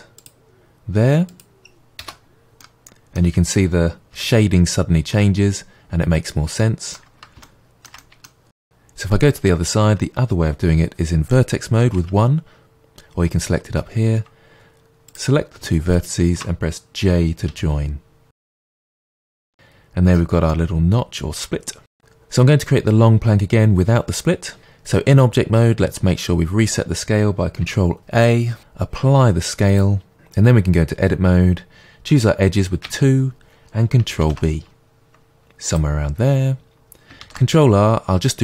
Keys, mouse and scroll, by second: 2.1 Return, 2.6 middle click, 4.1 Tab, 5.1 middle click, 7.4-15.0 shift+middle drag, 8.6 Tab, 11.9 1, 15.0 click, 15.9 shift+click, 17.4 j, 18.4 middle click, 19.3 Tab, 19.5-19.9 scroll down 1, 19.9 middle click, 20.4-21.0 scroll down 1, 21.0 shift+middle click, 21.5 middle click, 22.0 click, 24.6 Tab, 28.3 ctrl+a, 30.1 Tab, 32.8 2, 34.2 ctrl+b, 35.7 click, 37.2 ctrl+r.